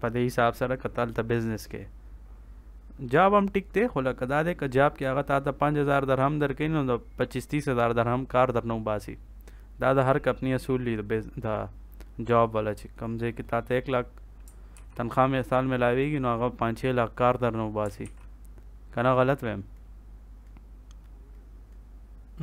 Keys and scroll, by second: 14.7 ctrl+s, 17.9 ctrl+s.